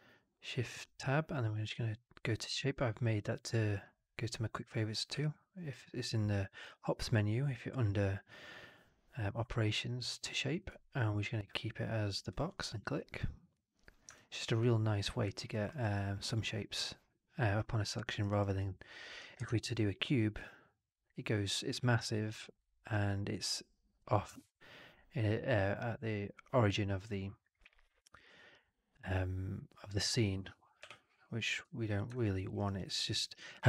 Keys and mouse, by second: 5.0 q, 14.0-15.3 alt+drag, 15.4 alt+middle click, 15.6 alt+right click, 15.8 alt+click, 18.1 alt+right click, 18.3 alt+right drag, 18.5-18.9 alt+drag, 19.4 shift+Tab, 22.0 alt+drag, 22.1 alt+middle drag, 22.1 alt+drag, 22.3 alt+right drag, 30.7 Delete, 31.3 click, 31.5 f, 32.0 alt+drag, 32.3 alt+middle drag, 32.5 alt+right drag, 32.7 alt+drag, 32.9 alt+middle drag, 33.1 alt+right drag, 33.3 alt+click.